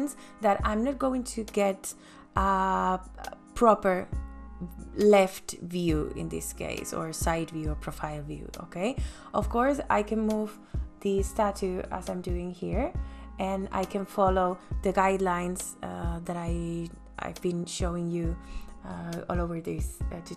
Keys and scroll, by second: 5.4 m.